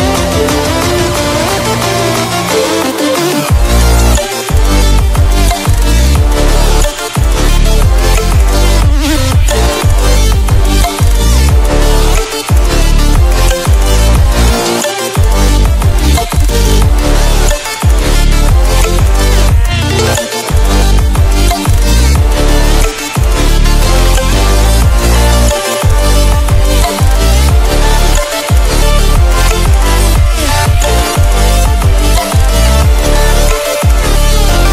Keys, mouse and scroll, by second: 0.0 scroll up 1, 1.3-6.7 drag, 7.2 scroll down 1, 8.0-8.8 scroll up 1, 8.8-12.5 drag, 13.4 scroll down 1, 15.0-20.2 drag, 20.8-21.8 scroll down 1, 21.8-23.0 scroll up 1, 23.1-30.6 drag, 32.6-34.0 scroll down 1.